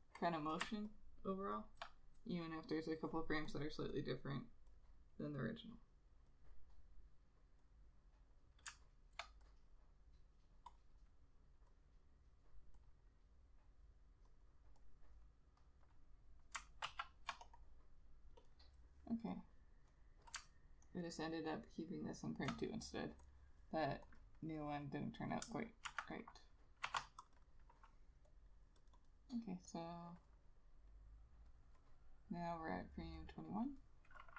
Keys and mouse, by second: 1.0 ctrl+click, 9.7 double click, 17.0 ctrl+z, 17.7 double click, 21.0 ctrl+click, 24.3 double click, 26.0 shift+F6, 27.0 shift+F5, 27.5 double click.